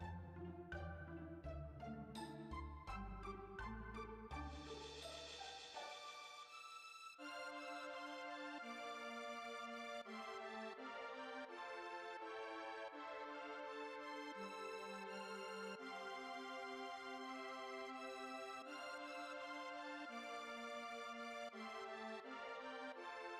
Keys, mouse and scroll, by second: 3.9-4.3 drag, 5.1 middle click, 7.5 click, 8.0-9.0 middle drag, 9.0-9.3 scroll up 1, 9.3 click, 9.5 Tab, 9.8 Tab, 10.1 Tab, 10.4 Tab, 12.4 drag, 12.5 a, 13.5 ctrl+a, 13.7 Tab, 13.9 Tab, 14.1 Tab, 14.6 Tab, 14.7-15.8 middle drag, 15.8 click, 17.5 click, 18.2 click, 18.8 click, 19.1 h, 19.3 click, 19.6 Tab, 20.0 click, 20.1-20.9 scroll up 1, 20.9 shift+click.